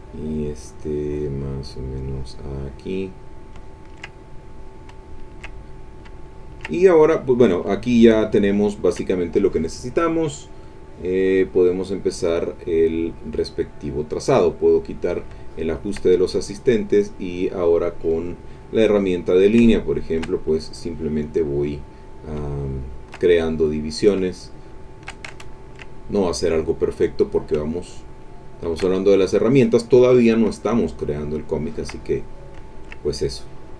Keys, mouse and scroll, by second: 1.4-3.4 drag, 3.6 ctrl+middle click, 3.7 ctrl+click, 4.3 ctrl+click, 5.1-6.7 ctrl+drag, 6.7 ctrl+middle click, 7.0 ctrl+middle click, 7.2 click, 7.7 ctrl+click, 7.8-9.1 ctrl+middle drag, 14.7 click, 15.4 ctrl+middle click, 17.0 click, 18.1 click, 19.4-20.4 shift+drag, 22.2-23.3 shift+drag, 24.0-25.2 shift+drag, 25.4-26.5 ctrl+shift+middle drag, 27.4-28.9 shift+drag, 30.3-32.0 shift+drag, 32.3 shift+middle click.